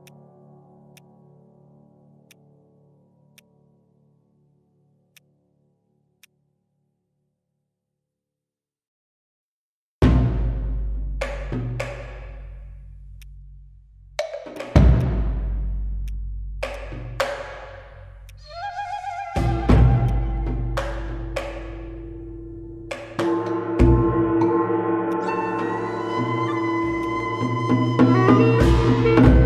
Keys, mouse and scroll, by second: 17.3-17.8 scroll up 1, 17.8-18.2 scroll down 1, 18.3 alt+click, 19.9 alt+middle click, 20.0 alt+click, 25.1 right click.